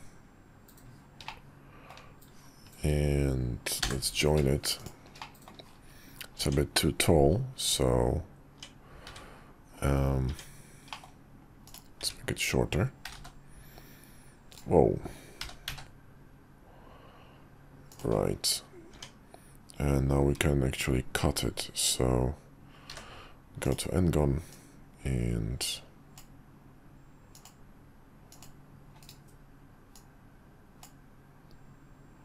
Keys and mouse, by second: 5.2 middle drag, 6.4 Tab, 7.7 Tab, 9.1 `, 10.3 Tab, 10.9 middle click, 11.6 click, 12.0 `, 13.0 g, 15.4 g, 18.9 Tab, 22.9 d, 24.5-26.2 drag, 29.9-30.8 drag.